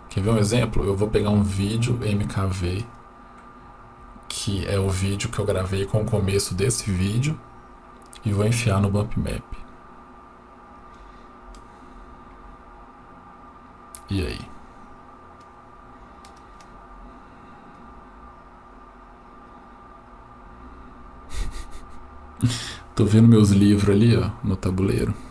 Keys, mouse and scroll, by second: 8.1-11.1 drag, 14.7-16.4 drag, 17.8-18.5 middle drag, 21.9-22.7 middle drag, 23.9-24.7 middle drag.